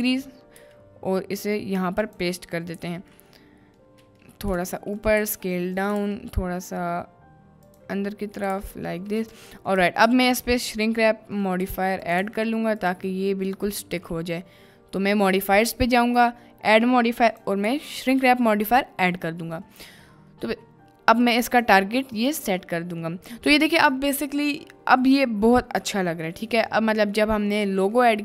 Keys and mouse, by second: 0.5 g, 2.0 click, 2.8 KP_Decimal, 3.2-3.8 middle drag, 4.1 middle click, 4.5-6.1 typing, 7.7 drag, 8.0-8.4 middle drag, 8.4 g, 8.6 x, 9.3 click, 9.6 middle click, 10.1 ctrl+s, 10.6-11.4 middle drag, 11.6 g, 11.7 y, 12.2 g, 13.1 x, 13.2 click, 13.7 click, 16.2-18.6 drag, 19.7 middle drag, 20.0-20.5 shift+middle drag, 22.7-23.0 middle drag, 23.5 middle click, 23.9-25.1 middle drag, 26.4 middle click, 28.1 middle click.